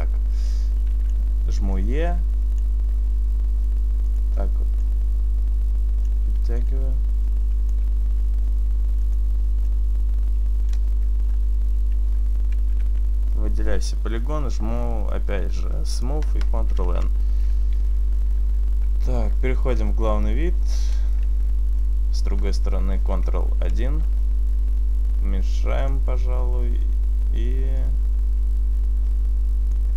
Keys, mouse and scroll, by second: 0.0-0.6 scroll up 2, 0.6 click, 1.7 e, 1.9 right click, 2.2 click, 3.0 s, 4.3 click, 4.9 click, 6.3 e, 6.7 right click, 6.7 click, 8.1 s, 9.2 click, 9.4 click, 11.3-12.7 scroll down 1, 12.7-14.0 scroll down 3, 12.7 a, 14.0 a, 16.9 ctrl+n, 16.9 click, 16.9-17.4 scroll down 1, 19.5 KP_1, 20.7-21.6 scroll down 1, 21.6-22.6 scroll down 1, 23.0 ctrl+KP_1, 24.5 s, 26.0 click, 27.8 click.